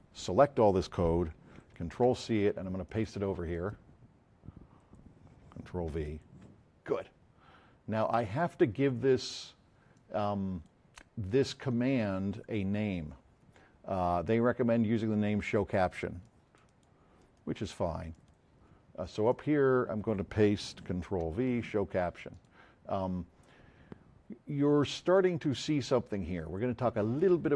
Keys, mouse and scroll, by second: 1.8 c, 2.8 click, 6.0 v, 8.4 click, 14.3 F7, 17.3 right click, 18.1 click, 19.3 click, 21.0 ctrl+v, 22.3 click, 25.3 click, 25.9 click.